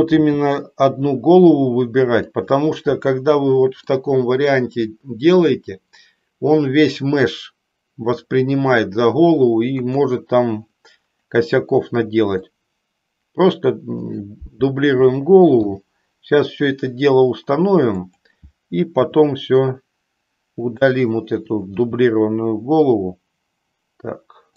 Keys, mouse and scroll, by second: 0.2 g, 2.3 click, 4.0 middle click, 9.8 KP_1, 12.4-14.2 drag, 15.7 g, 18.0 click, 19.1 s, 20.7 click, 21.8 g.